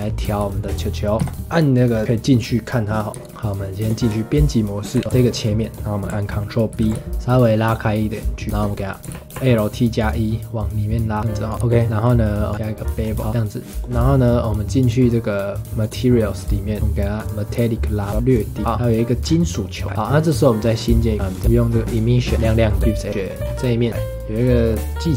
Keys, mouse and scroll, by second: 0.4-1.1 shift+middle drag, 1.1 scroll up 1, 1.2 KP_Decimal, 1.9 scroll down 2, 3.1 Tab, 4.9 2, 5.0 middle click, 5.1 alt+click, 5.3-6.7 middle drag, 6.7 ctrl+b, 8.7 middle click, 9.1 alt+e, 11.6 middle click, 12.5 click, 13.0 scroll up 2, 13.2-14.8 middle drag, 14.8 click, 15.8-16.8 drag, 16.8 middle click, 17.1-18.6 drag, 18.6 ctrl+s, 18.7 scroll down 2, 18.8-21.1 middle drag, 19.2-19.8 scroll up 2, 21.1-22.3 drag, 22.3 middle click, 22.4-22.7 scroll up 2, 22.7 middle click, 22.8 Tab, 23.0 middle click, 23.4 scroll up 3, 23.6-25.1 middle drag.